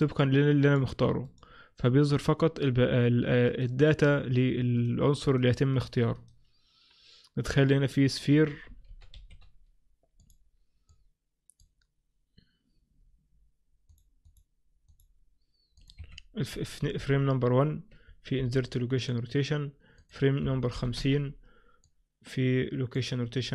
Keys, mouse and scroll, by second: 0.2 right click, 0.7 right click, 3.6 right click, 4.8 right click, 5.4 right click, 5.8 right click, 6.2 right click, 7.6 click, 9.0 shift+c, 9.2 shift+a, 11.0 click, 15.9 click, 20.1 click.